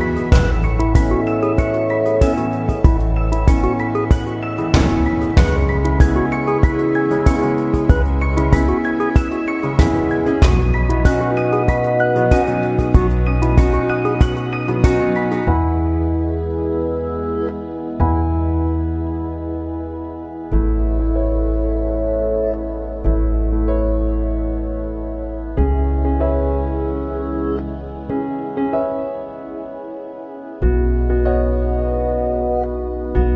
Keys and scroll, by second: 7.9 ctrl+0, 8.1 ctrl+=, 9.5 ctrl+=, 16.8 ctrl+z, 17.0 ctrl+0, 17.4 ctrl+=, 19.2 ctrl+0, 22.9 ctrl+=, 23.5 ctrl+=, 24.1 ctrl+0, 25.2 ctrl+=, 28.1 ctrl+0, 29.2 ctrl+=, 30.9 ctrl+z, 31.5 ctrl+0, 33.0 ctrl+=.